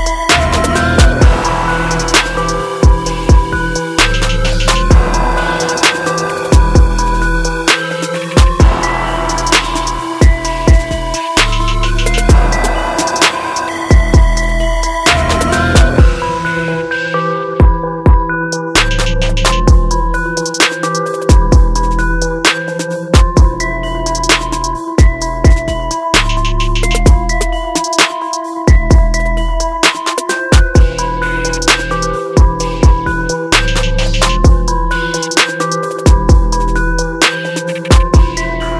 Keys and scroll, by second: 10.7 ctrl+alt+z, 21.4 ctrl+alt+super+z, 24.2 ctrl+alt+z, 28.4 ctrl+alt+z.